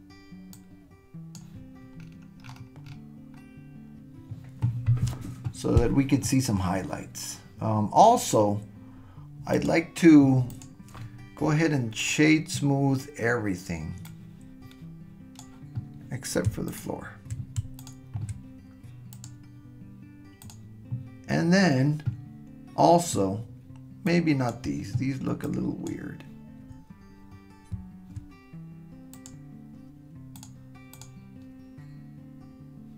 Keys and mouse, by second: 9.5 click, 10.6 click, 14.1-15.4 drag, 16.7 shift+click, 17.8 shift+click, 19.1-20.5 drag, 24.1-24.6 drag, 25.4-26.2 shift+drag, 29.3-30.5 drag, 30.9 click.